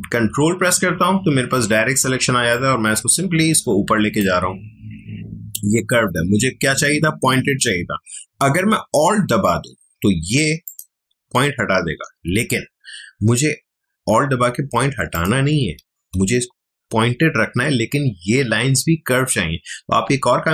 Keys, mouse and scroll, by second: 2.5-8.5 ctrl+drag, 8.7-10.6 ctrl+drag, 12.1 ctrl+z, 14.8 ctrl+alt+z, 15.1 alt+click, 16.0 ctrl+z.